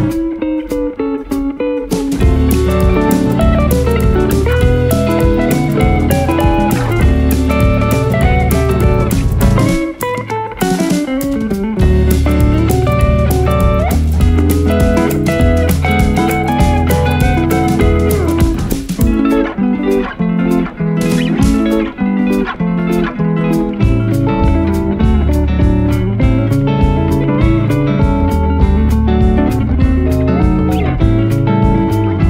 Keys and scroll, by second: 4.1 Delete, 8.7 space, 20.1 space, 24.9 shift+F2, 25.1 F3, 30.5 space.